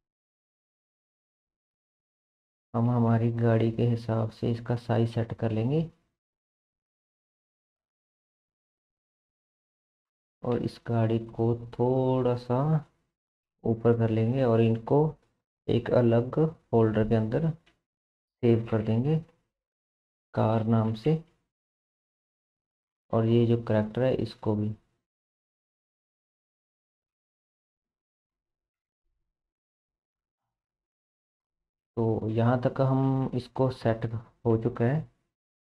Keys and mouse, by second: 0.6 g, 3.2 s, 10.2 KP_1, 12.9 g, 14.4-15.9 middle drag, 17.7 m, 22.6 click, 23.6 click, 26.4 m, 29.4-31.9 drag, 30.7 KP_0, 32.4 ctrl+s, 33.9 space.